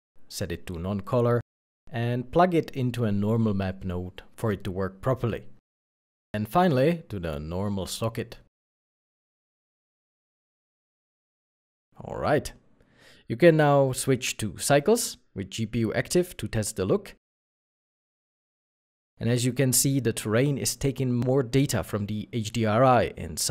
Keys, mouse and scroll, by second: 2.1 shift+a, 2.7 n, 3.3 o, 11.1 alt+a, 11.2 middle click, 15.8 shift+middle click, 19.0 middle click.